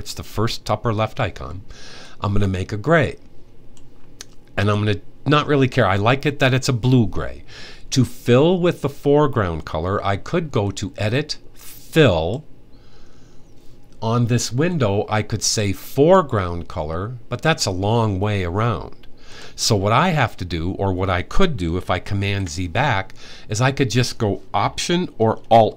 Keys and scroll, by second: 22.1 super+z.